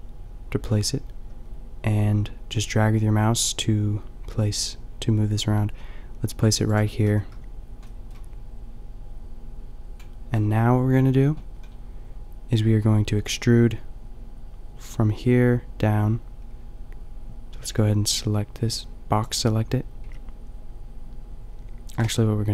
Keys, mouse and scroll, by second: 6.8-10.0 drag, 7.1 a, 10.0 middle click, 10.3 click, 17.8 b, 18.8 click, 20.0 b, 20.6-22.2 drag.